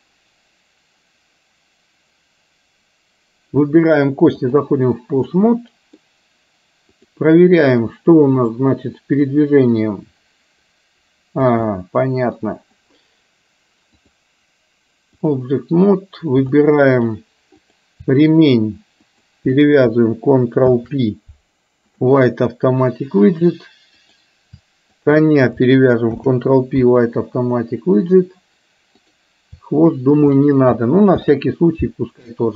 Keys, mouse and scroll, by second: 5.4 middle click, 8.5 click, 9.4-11.5 drag, 11.7-12.5 middle drag, 14.1-15.4 drag, 16.5-17.0 shift+middle drag, 17.6 click, 19.0 shift+click, 20.6 ctrl+p, 24.0 click, 26.1 ctrl+p, 29.0 click, 31.1 ctrl+p.